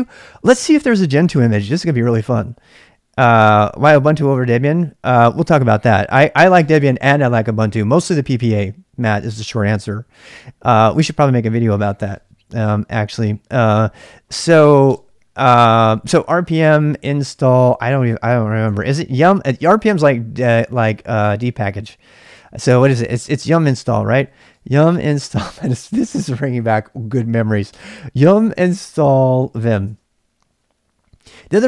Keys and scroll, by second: 15.0 space, 16.7-19.7 typing, 22.5-26.3 typing, 27.7 space, 29.0-31.6 typing.